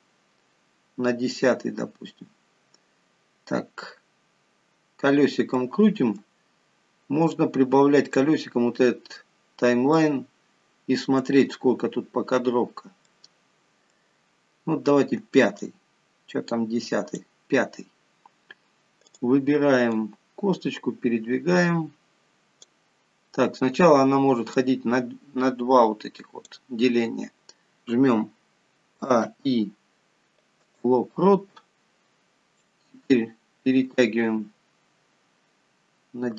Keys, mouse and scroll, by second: 3.7 scroll up 5, 4.5-5.0 scroll up 4, 5.9 middle click, 7.8 click, 9.2-9.6 scroll down 3, 10.1 scroll down 2, 10.3 middle click, 11.9-13.3 scroll up 17, 13.5 middle click, 14.9 scroll up 2, 16.0 click, 18.5 scroll down 1, 19.5 click, 20.4 click, 23.4-23.9 scroll down 4, 25.0 click, 29.4 a, 29.6 i, 33.0 click.